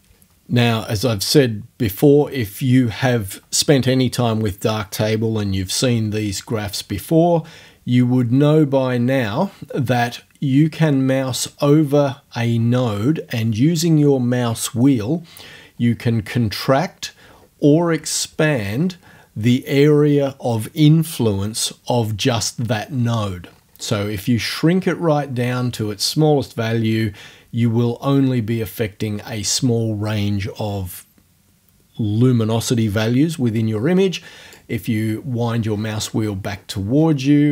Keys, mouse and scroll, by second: 10.8-11.3 scroll up 2, 11.5-12.7 scroll up 4, 15.5-16.4 scroll up 2, 17.3-19.0 scroll down 8, 22.7-25.3 scroll up 6, 26.5-34.7 drag, 34.9-37.2 scroll down 8, 35.5 click, 35.7 click.